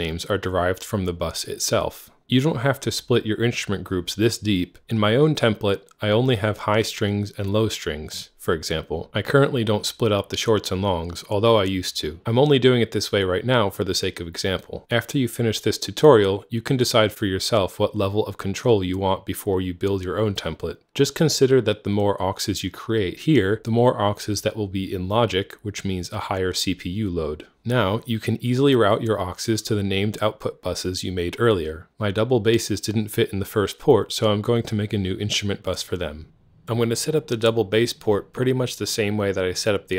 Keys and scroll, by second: 2.4-3.3 typing, 3.6 Tab, 4.8-5.3 typing, 32.1 super+b, 35.8-36.7 typing.